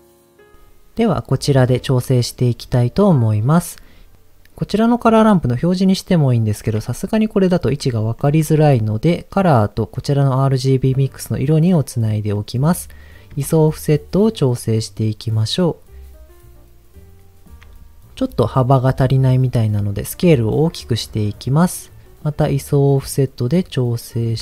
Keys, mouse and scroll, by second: 0.1 middle click, 2.7 middle click, 5.4 ctrl+shift+click, 8.1 ctrl+shift+click, 9.1-11.0 drag, 12.3 middle click, 12.6 scroll up 1, 13.4-17.5 shift+drag, 19.3 scroll up 2, 20.5-21.6 shift+drag, 22.2-24.3 shift+drag.